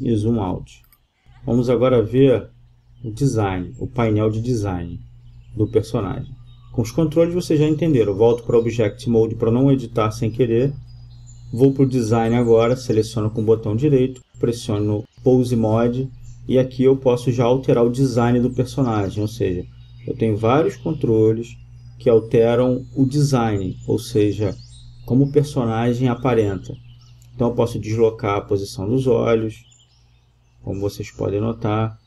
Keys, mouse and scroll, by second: 11.1 right click, 17.0 click, 17.2 click, 19.4 g, 22.0 g, 22.9-24.4 drag, 26.1 click, 30.3 g.